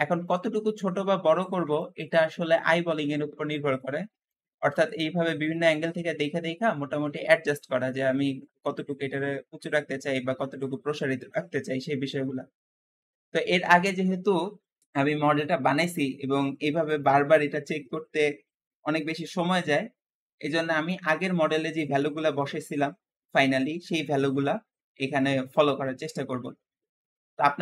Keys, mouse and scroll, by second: 0.1-0.5 scroll up 1, 0.5-3.3 middle drag, 4.3-10.5 middle drag, 11.4-12.2 scroll up 2, 12.2-15.7 middle drag, 16.9-20.0 middle drag.